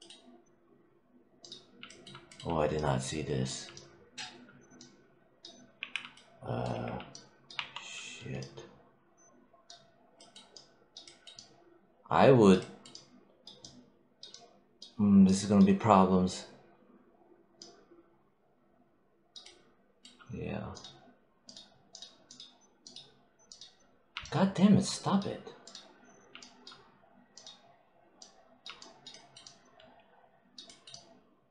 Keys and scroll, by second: 5.6 z, 6.6 3, 7.4 1.